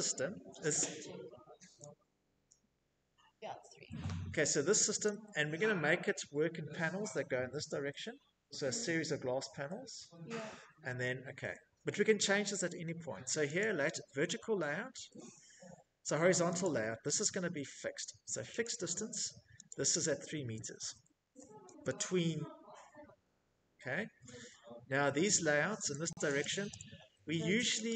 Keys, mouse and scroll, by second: 3.2 click, 11.8 click, 14.8 click, 15.4 click, 16.8 click, 17.8 click, 18.7-19.7 typing, 19.8 Return, 25.8 click, 26.0 click, 26.7 click, 27.4 click.